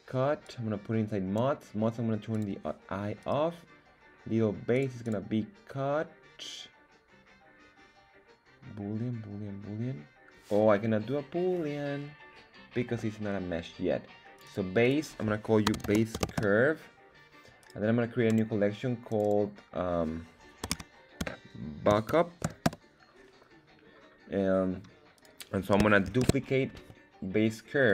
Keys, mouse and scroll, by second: 0.4-1.3 drag, 2.3 click, 3.2 right click, 4.7 click, 5.0-12.9 drag, 14.3 click, 17.6-18.4 right drag, 19.1 click, 19.2-24.0 drag, 25.1 right click, 26.0 shift+d, 26.7 Escape, 27.8-27.9 drag.